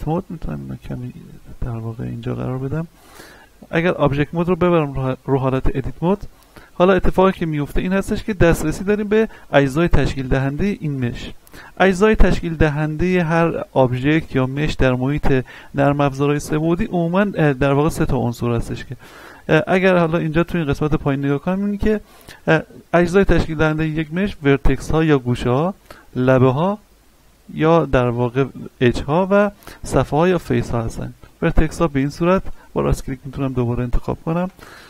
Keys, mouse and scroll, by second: 6.1 click, 6.7-7.7 scroll up 1, 7.7 middle click, 8.7-9.7 scroll up 1, 24.4 click, 29.7 click, 31.9 right click.